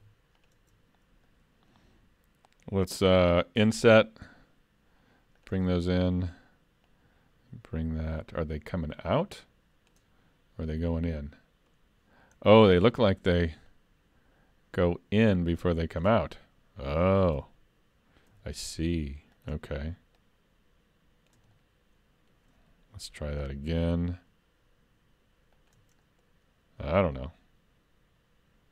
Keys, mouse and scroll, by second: 0.4 shift+click, 1.3 middle click, 3.6 i, 5.8 middle click, 6.9 click, 10.5-10.9 scroll up 2, 10.9 middle click, 12.4-12.8 scroll down 2, 12.8 middle click, 13.7 click, 16.3-18.3 scroll up 3, 18.3 s, 20.2 click, 21.5 middle click, 23.7 i, 26.0 middle click, 26.9 click.